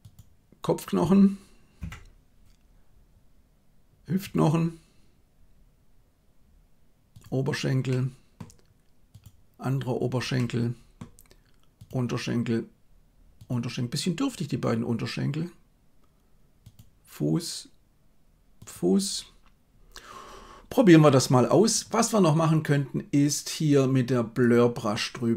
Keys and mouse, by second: 1.8 KP_1, 7.8 middle click, 10.3 middle click, 13.3 right click.